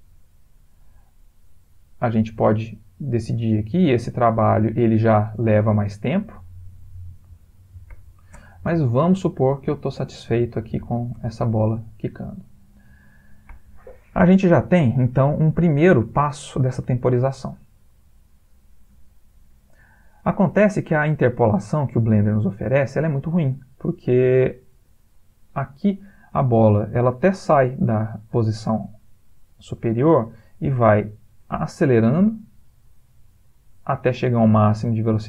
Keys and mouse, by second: 0.6 click, 0.8 g, 1.9 click, 2.1 g, 3.6 click, 3.9 g, 5.2 space, 7.9 Escape, 8.3 space, 10.9 Escape, 11.2 space, 13.5 Escape, 14.9 click, 16.9 ctrl+middle click, 17.8 click, 21.0 middle click, 21.2 middle click, 21.5 ctrl+middle click, 21.7 ctrl+middle click, 22.1 middle click, 22.3 middle click, 22.8 ctrl+middle click, 23.0-24.0 ctrl+middle click, 23.1-23.6 middle click, 23.8 middle click, 23.9 middle click, 24.4 ctrl+middle click, 25.8 click, 30.1 click.